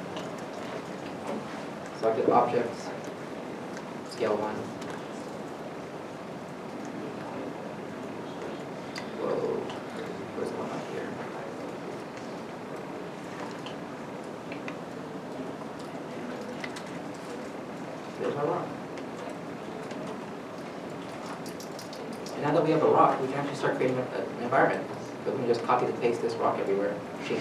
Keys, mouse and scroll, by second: 0.0 o, 0.0 c, 0.0 k, 6.0 k, 6.1 alt+Tab, 8.4 alt+Tab, 9.6 alt+Tab, 12.1 alt+Tab, 12.1 right click, 13.0 alt+Tab, 18.3 right click, 25.7 ctrl+c.